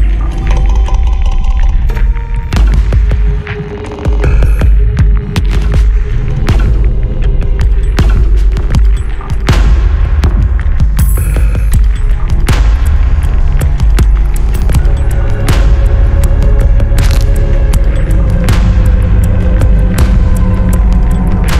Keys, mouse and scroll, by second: 1.0 click, 2.4 click, 4.4 click, 5.8 3, 6.4 0, 6.9 Return, 7.0 click, 8.0 3, 8.4 0, 9.0 Return, 9.0 click, 10.0 3, 10.5 0, 11.4 click, 12.6 scroll down 2, 14.6-16.0 drag, 16.9 5, 17.6 click, 19.0 5, 20.0 click, 21.4 3.